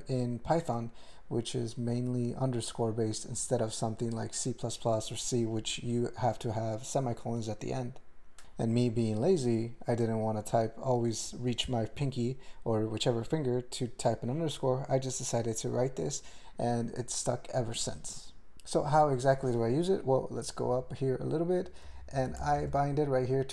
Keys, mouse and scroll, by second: 20.7-21.6 ctrl+p, 21.8 ctrl+n, 22.0 ctrl+n, 22.4 alt+m, 22.6 ctrl+space, 22.7 ctrl+e.